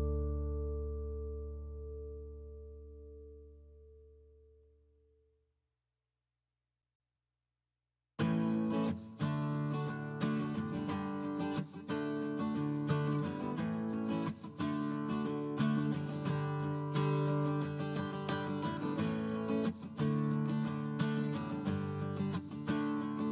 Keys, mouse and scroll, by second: 13.0 Escape, 23.0 space.